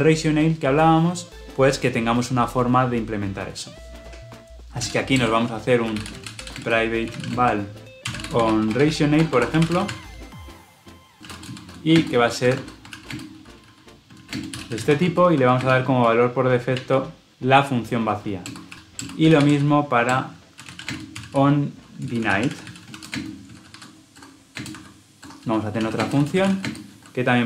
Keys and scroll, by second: 18.7 ctrl+z, 19.9 Return, 22.0 Return.